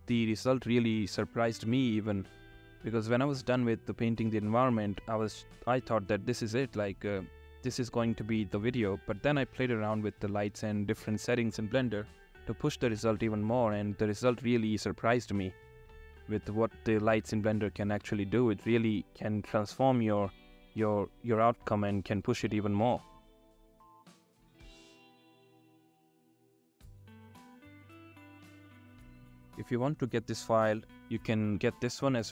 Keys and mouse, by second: 4.3-5.0 drag, 5.8 click, 6.9-7.8 drag, 14.8 click, 19.6-20.2 drag, 26.6 click, 27.3-28.6 drag.